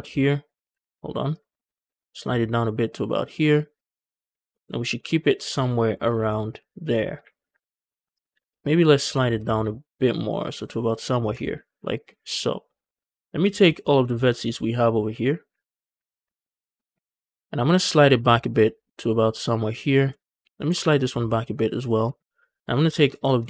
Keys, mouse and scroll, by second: 0.7 ctrl+z, 1.2 shift+click, 1.5 g, 1.6 g, 1.8 c, 3.1 shift+click, 3.6 click, 4.1 scroll down 2, 4.4 shift+middle click, 4.8 shift+middle click, 5.4 shift+middle click, 5.9 scroll down 2, 6.1 shift+middle click, 6.8 scroll up 1, 8.0 click, 8.4 alt+click, 8.7 scroll up 1, 8.9 g, 9.0 g, 9.2 c, 10.7 shift+click, 11.0 scroll down 2, 11.2 shift+middle click, 11.6-12.6 scroll up 3, 11.8 shift+middle click, 13.0 click, 13.3 scroll down 2, 13.5 shift+middle click, 14.0 shift+middle click, 14.1 scroll up 1, 14.4 shift+middle click, 15.1 scroll down 1, 15.6 ctrl+click, 15.9 scroll down 2, 16.1 shift+middle click, 16.3-17.0 scroll up 3, 16.6 shift+middle click, 17.1 shift+middle click, 17.3 scroll up 1, 17.6 g, 17.7 g, 19.7 shift+click, 20.3 click, 20.5 g, 20.6 g, 21.6 shift+click, 22.2 click, 22.6 scroll down 2, 22.8 shift+middle click, 23.1 shift+middle click, 23.3 scroll up 1.